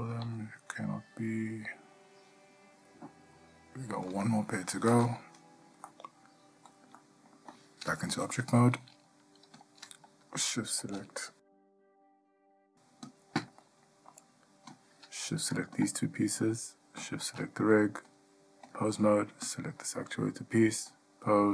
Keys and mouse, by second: 0.4 g, 6.1-6.9 middle drag, 7.2-7.5 shift+middle drag, 8.4 Tab, 12.2 middle drag, 13.2 click, 13.8-14.3 ctrl+middle drag, 18.3-18.9 drag, 19.6 click, 21.1-21.5 drag.